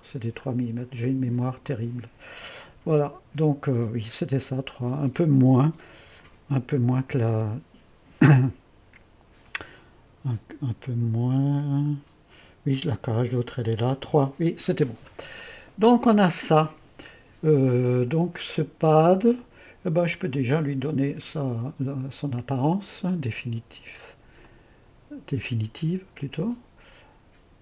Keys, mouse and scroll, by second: 1.4-2.7 drag, 2.7 1, 4.2-5.8 drag, 6.0 1, 10.9-11.7 scroll up 2, 15.2-15.5 scroll down 2, 15.5-16.1 scroll up 2, 15.9-20.4 drag, 20.7 ctrl+d, 22.8-27.6 drag.